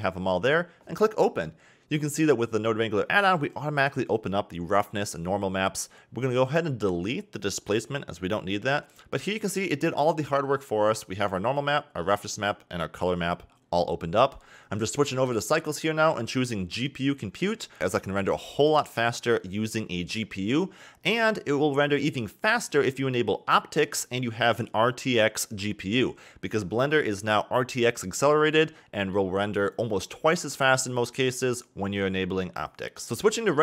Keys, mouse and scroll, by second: 0.7 scroll down 1, 0.8-3.9 middle drag, 3.9 click, 4.5 click, 5.2 click, 6.0 x, 6.8 click, 7.1 x, 7.4 middle click, 8.0-8.4 scroll down 4, 8.4 middle click, 8.9 scroll down 4, 9.1-9.6 scroll up 3, 9.6-10.4 middle drag, 10.4-11.5 scroll up 2, 11.5-12.6 scroll up 3, 12.6 click, 13.3-20.3 drag, 31.6 click, 32.6-33.6 scroll up 1.